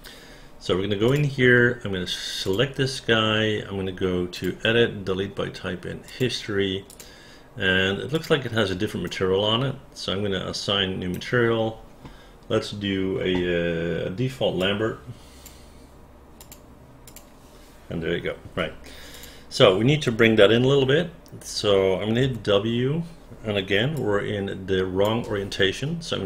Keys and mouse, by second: 1.1-2.5 drag, 6.0 click, 6.8 click, 8.1 click, 9.0-11.1 right drag, 15.0 click, 16.4 click, 17.0 click, 19.1 click, 22.2 w, 24.0-25.0 alt+drag.